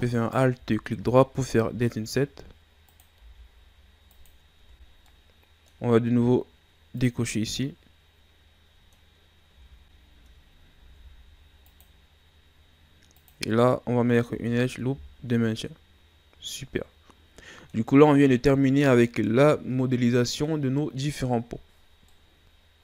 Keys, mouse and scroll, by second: 0.2 alt+right click, 1.7 i, 4.6 Tab, 4.9 scroll down 2, 5.1-7.0 middle drag, 7.0 click, 7.5-9.2 middle drag, 9.2 scroll up 1, 9.4 Tab, 10.8 ctrl+r, 13.6-14.2 middle drag, 14.2 Tab, 14.5 scroll down 2, 14.7-17.7 middle drag, 19.2-22.6 middle drag.